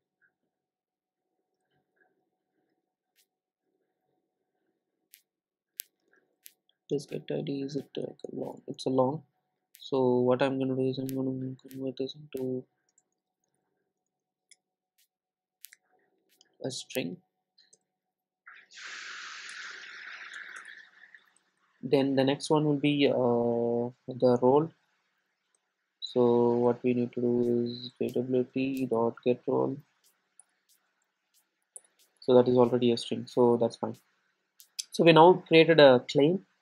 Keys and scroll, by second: 7.1 super+b, 14.6 Return, 22.5 Return, 29.0 Return.